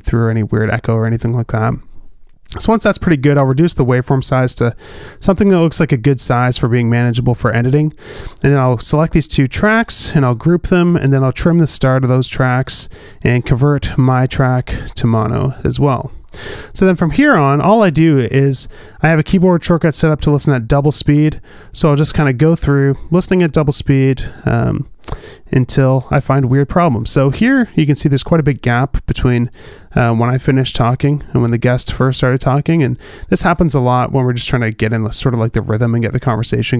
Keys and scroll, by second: 3.1 shift+Down, 4.6 shift+Up, 5.2 shift+Down, 5.4 shift+Up, 10.2 super+g, 12.0 a, 21.2 space, 27.3 space, 30.3 space, 32.6 space.